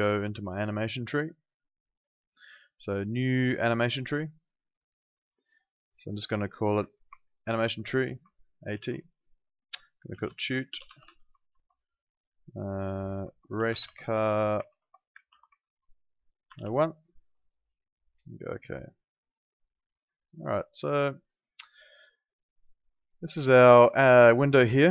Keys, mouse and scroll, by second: 4.0 click, 7.2 shift+a, 7.5 shift+t, 8.7 shift+-, 9.9-12.0 typing, 13.4-17.1 typing, 18.5 click, 22.9 click.